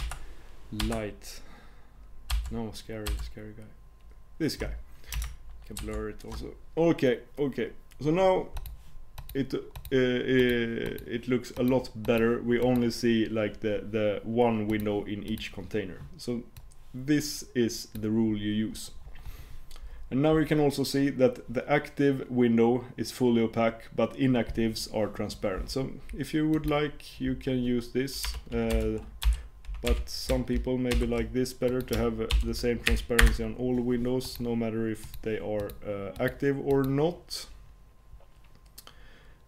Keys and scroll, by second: 5.8 shift+super+w.